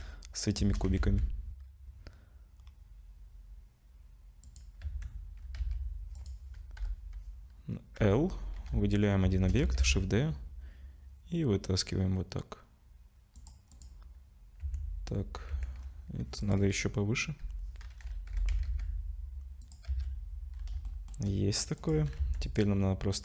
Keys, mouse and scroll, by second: 0.3 scroll up 2, 4.8 Tab, 6.2 click, 6.8 l, 8.0 l, 9.4 shift+d, 13.7 click, 14.6 Tab, 15.5 Tab, 15.8-16.4 scroll up 1, 16.4 click, 16.4-16.8 scroll up 2, 17.4 l, 18.3 g, 19.9 z, 20.5 scroll down 4, 20.9 shift+middle click, 21.8 click, 22.2 Tab, 22.4 click.